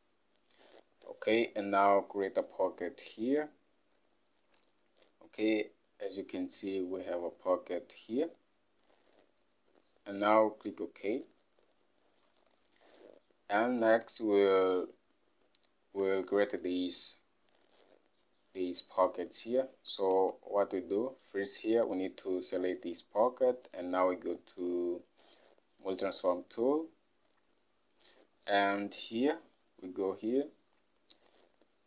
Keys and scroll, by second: 12.6 Home, 14.0 ctrl+Tab.